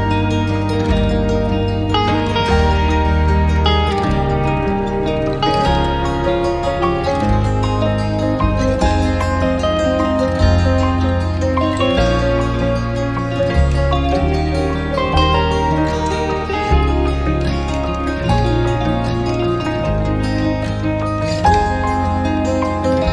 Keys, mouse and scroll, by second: 2.1 double click.